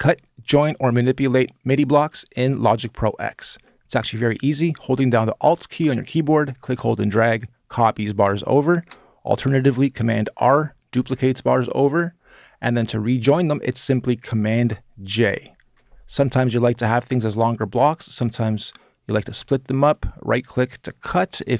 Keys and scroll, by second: 10.3 super+r, 15.0 super+j.